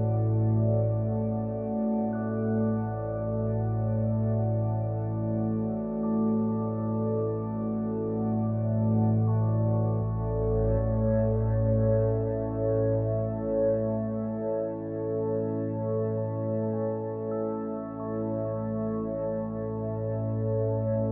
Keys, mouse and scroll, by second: 1.3 middle click, 5.2 ctrl+z, 12.8 KP_Decimal, 13.9-14.6 middle drag, 15.3-15.6 middle drag, 16.4 g, 18.0 middle drag, 18.5-19.7 middle drag.